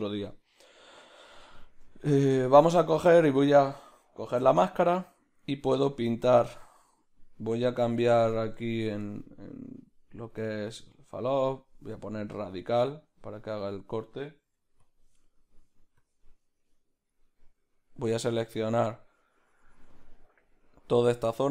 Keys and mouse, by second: 0.0-6.1 middle drag, 6.1 click, 16.0 click, 17.2-18.4 middle drag, 18.4 click, 20.7 middle click.